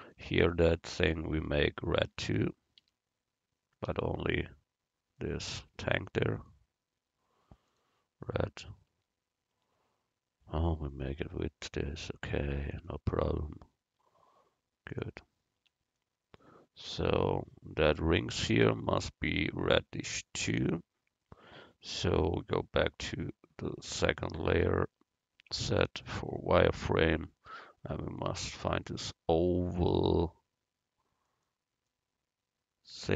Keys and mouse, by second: 2.1 Tab, 2.9 a, 3.9 l, 6.4-8.3 drag, 9.0 Tab, 9.8 Tab, 10.5 Tab, 11.0 click, 11.3 Tab, 15.7 Tab, 16.3 middle click, 23.1-24.9 drag, 24.9 middle click, 25.5 z, 26.0 middle click, 32.1-33.1 middle drag.